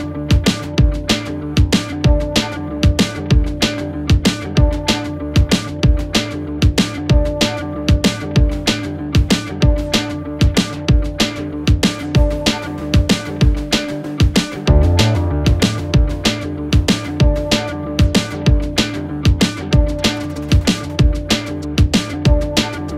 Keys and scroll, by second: 9.9-10.7 typing.